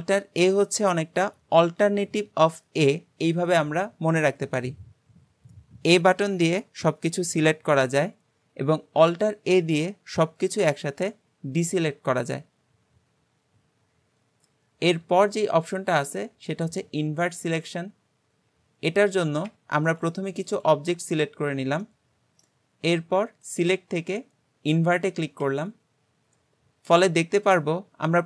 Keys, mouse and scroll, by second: 15.5-18.5 drag, 19.0 click, 19.9 shift+click, 20.5 shift+click, 21.4-21.8 scroll down 2, 21.8-23.4 middle drag, 23.4-26.5 drag.